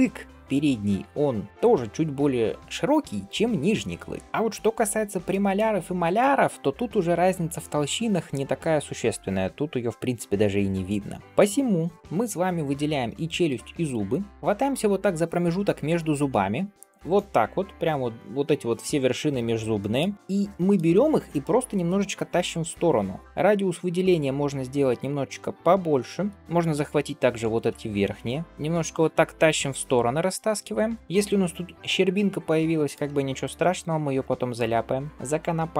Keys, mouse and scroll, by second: 4.0 scroll down 2, 4.2 shift+middle click, 5.1-5.5 middle drag, 11.9 shift+click, 11.9-12.7 scroll down 1, 12.7-13.1 scroll up 1, 13.3 Tab, 13.9 shift+middle click, 14.5-17.5 drag, 19.2 scroll down 1, 19.6 shift+middle click, 19.8 shift+click, 20.1 middle click, 21.8 g, 26.3-27.4 shift+drag, 28.4 g, 32.6 shift+middle click, 33.3 middle click, 34.1 shift+middle click, 34.7 middle click.